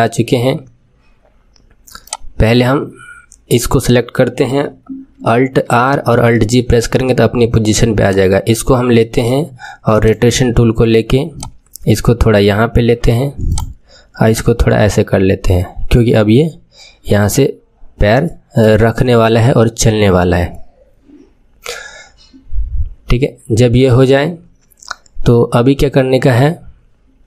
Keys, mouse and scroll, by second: 2.0 click, 3.4 click, 5.7 alt+r, 6.3 alt+g, 8.0 click, 10.0-11.4 drag, 13.4 click, 14.2 click.